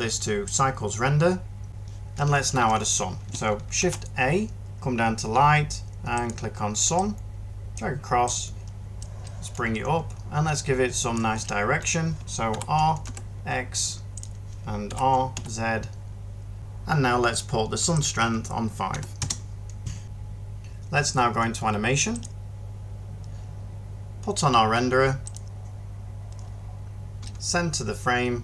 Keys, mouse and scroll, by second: 3.7 a, 12.4 r, 12.9 x, 14.7 r, 15.2 r, 16.5 ctrl+z, 18.8 5, 19.1 Return.